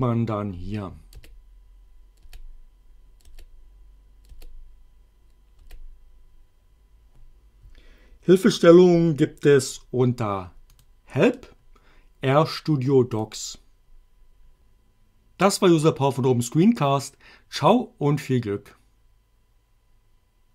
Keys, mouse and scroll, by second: 1.1 Return, 2.3 Return, 3.3 Return, 4.3 Return, 5.6 Return, 10.8 click, 13.2 click.